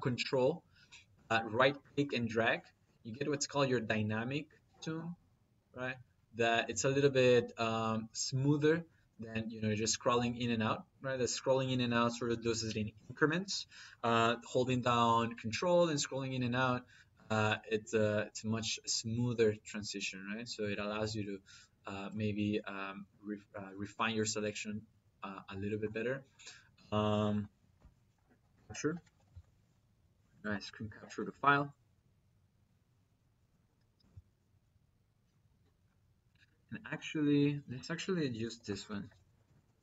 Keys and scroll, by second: 28.5-29.3 typing, 30.1 Down, 33.8 Return, 37.1 Escape, 38.2-39.8 typing, 39.2 Escape.